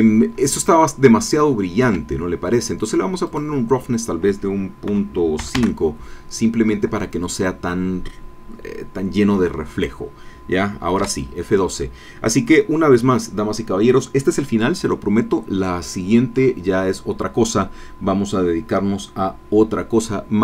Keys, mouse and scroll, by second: 0.8 ctrl+middle click, 0.9 ctrl+scroll up 1, 3.2 middle click, 4.9 KP_Decimal, 5.4 KP_5, 5.6 KP_Enter, 11.0 F12.